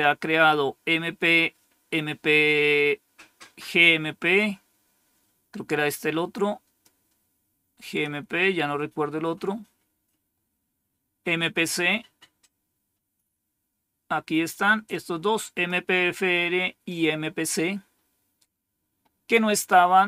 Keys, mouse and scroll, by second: 4.2-6.7 drag, 7.7 click, 8.1 click, 14.7 click.